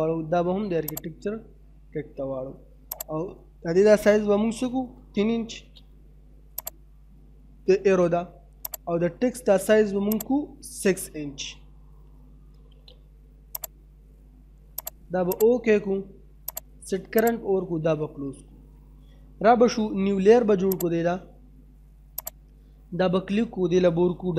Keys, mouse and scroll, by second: 4.5 3, 6.6 click, 11.7 6, 13.6 click, 18.0 middle click, 20.7 click.